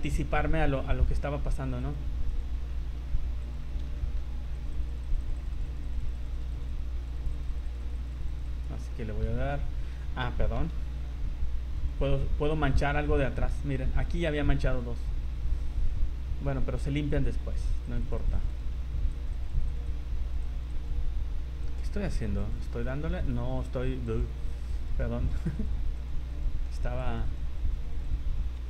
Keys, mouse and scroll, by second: 0.9 click, 1.8 click, 2.3 click, 2.7 middle click, 3.4 click, 4.0 shift+middle click, 4.5 click, 4.7 click, 5.0 click, 5.2 click, 5.5 click, 5.8 click, 6.1 click, 6.2 click, 6.5 click, 6.7 click, 7.2 click, 7.4 click, 7.6 click, 7.8 click, 8.0 click, 8.5 click, 8.9 middle click, 10.6 v, 11.7 click, 12.8 middle click, 17.1 click, 17.7 click, 17.9 click, 18.1 click, 18.2 click, 18.4 click, 18.5 click, 18.7 middle click, 19.1 click, 19.3 click, 19.7 click, 19.9 click, 20.5 click, 20.9 click, 21.6-21.9 scroll up 5, 21.6 middle click, 22.4 click, 22.9 middle click, 23.6 click, 24.8 click, 25.2 click, 25.5 click, 26.1 click, 26.3 click, 26.6 middle click, 27.0 click, 27.2 click, 27.7 click, 27.9 click, 28.0 click.